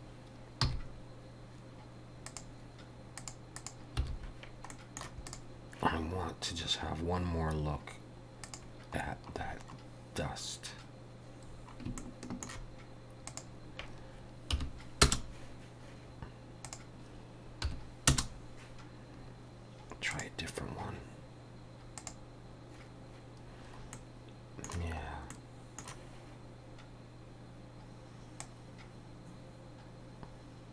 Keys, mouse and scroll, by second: 4.0 n, 4.7 middle click, 5.3 click, 8.5 click, 9.1-10.0 scroll down 9, 11.6 scroll down 4, 12.0 shift+middle click, 13.3 click, 16.7 click, 20.2 click, 22.0 click, 23.6 scroll up 2, 24.0 middle click, 25.4 middle click, 28.5 click.